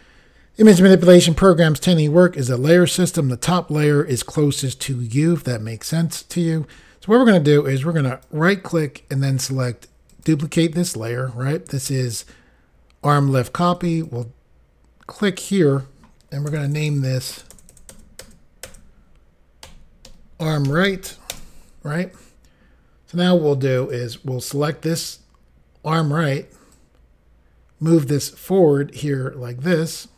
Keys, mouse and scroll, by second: 8.0 right click, 10.1 click, 13.7 click, 13.9 click, 15.1 click, 16.5 BackSpace, 16.7 BackSpace, 16.9 BackSpace, 19.6-21.2 typing, 21.3 Return, 23.8 click, 26.8 click.